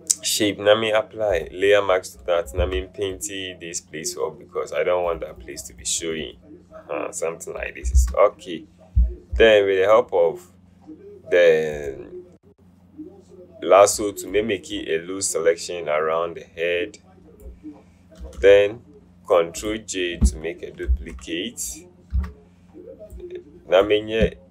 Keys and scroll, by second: 2.8 b, 8.1 v, 21.0 ctrl+j, 22.3 v.